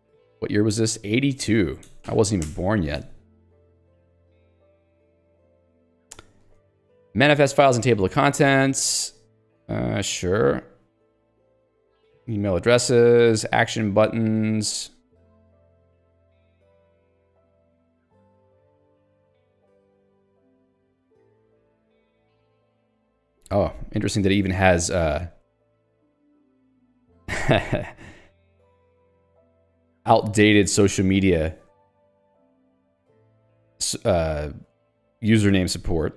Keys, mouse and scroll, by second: 2.6 Return, 3.0 Escape, 4.2 click, 4.8 ctrl+g, 5.2 ctrl+d, 5.7 j, 7.0 k, 8.1 j, 8.6 ctrl+d, 24.4 ctrl+u, 25.2 k, 25.7 l, 26.3 j, 29.8 Escape, 30.2 j, 32.5 k, 33.0 j, 34.3 l, 34.8 k.